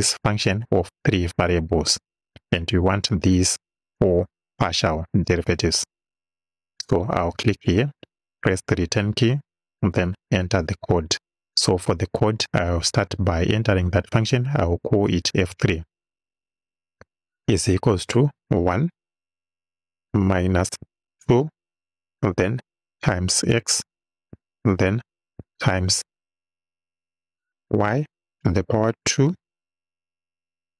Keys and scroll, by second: 8.4 Return, 14.4 f, 15.1 3, 17.4 =, 18.4 1, 20.0 -, 20.9 2, 22.8 shift+8, 23.6 shift+x, 24.4 shift+x, 25.2 shift+8, 27.6 y, 28.2 shift+6, 29.2 shift+2.